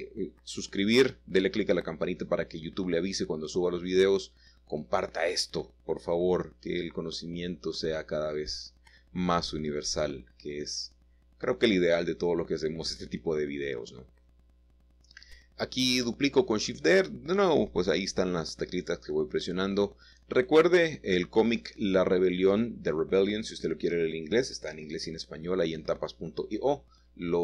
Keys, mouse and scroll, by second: 0.0-1.0 drag, 0.7-2.2 middle drag, 2.8-3.7 scroll down 1, 3.7 middle click, 3.8-4.2 scroll down 1, 4.6 middle click, 5.3 shift+click, 6.5-7.5 shift+middle drag, 8.6 typing, 11.7-12.8 drag, 12.9 7, 14.2 shift+middle click, 14.5-15.7 scroll up 1, 16.0 shift+middle click, 18.1-18.6 typing, 21.1 click, 21.6-22.2 typing, 23.7 click, 24.2-25.0 scroll down 1, 25.5 middle click, 26.3-27.3 drag.